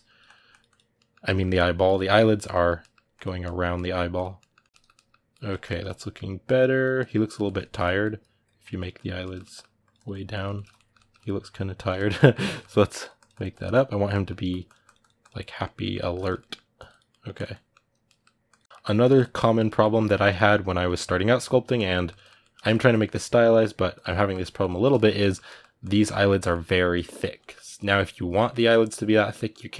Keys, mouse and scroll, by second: 0.7 ctrl+middle click, 1.6 click, 2.3 middle click, 2.9 click, 3.2 middle click, 3.9 click, 4.2-6.2 middle drag, 6.2 click, 6.8 middle click, 7.1 click, 7.2-8.4 ctrl+middle drag, 8.4 click, 9.0 ctrl+middle click, 9.6 click, 10.1-12.8 ctrl+middle drag, 12.8 click, 13.5 middle click, 14.3-15.3 drag, 15.3-16.5 middle drag, 16.5 click, 16.9 middle click, 17.1 click, 17.3 middle click, 18.3 click, 18.6 middle click, 18.8 click, 19.3 middle click, 20.0 click, 20.1 middle click, 20.6-21.7 drag, 21.7-22.7 ctrl+middle drag, 22.7-23.9 drag, 23.9 middle click, 24.4 click, 24.6 ctrl+middle click, 25.6 click, 25.8-27.6 ctrl+middle drag, 27.6 click, 28.3-29.3 middle drag, 29.3 click.